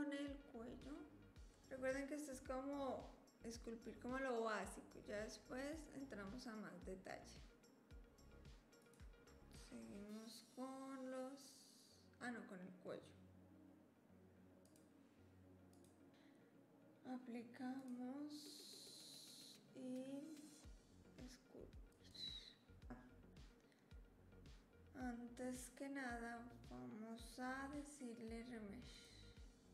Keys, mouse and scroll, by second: 8.8 click, 12.3 drag, 14.6 click, 15.7 click, 17.8-19.3 drag.